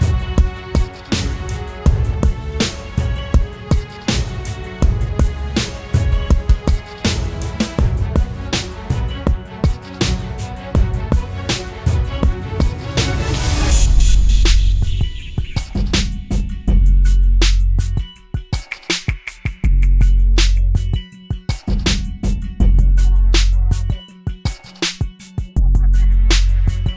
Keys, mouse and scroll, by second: 2.1 alt+click, 7.6 ctrl+t, 8.5 alt+shift+click, 15.1 Return, 18.1 Right, 19.0 Down, 20.0 Down, 20.5 Up.